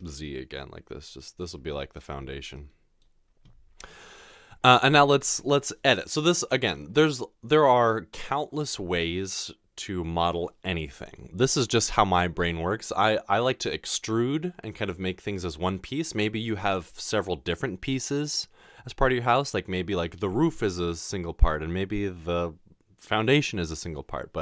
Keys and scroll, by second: 0.0 typing.